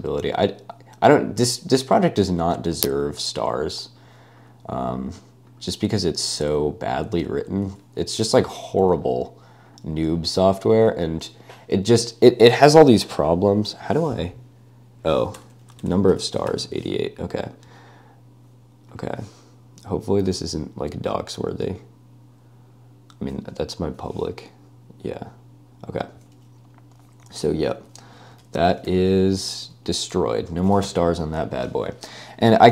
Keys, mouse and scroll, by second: 7.8 super+c, 8.4 super+v, 9.7 click, 15.4 BackSpace, 16.5 typing, 17.5 click, 27.3-30.9 typing, 32.5-32.7 typing.